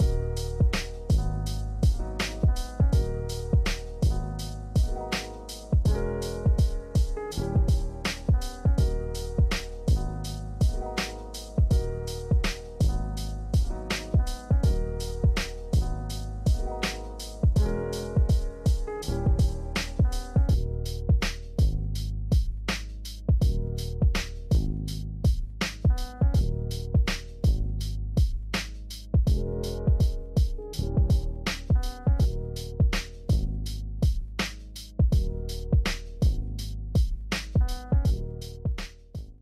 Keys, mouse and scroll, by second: 10.0 ctrl+space, 10.3 ctrl+click, 10.5 ctrl+space, 12.9 ctrl+space, 13.1 ctrl+click, 13.4 ctrl+space, 14.2 alt+click, 16.3-17.4 scroll down 1, 17.4-17.9 scroll up 1, 18.5 click, 20.1 ctrl+alt+shift+e, 25.7-26.3 typing, 28.3 f, 29.1 ctrl+space, 29.3 ctrl+click, 29.5 ctrl+space, 31.1 space, 31.7 alt+click.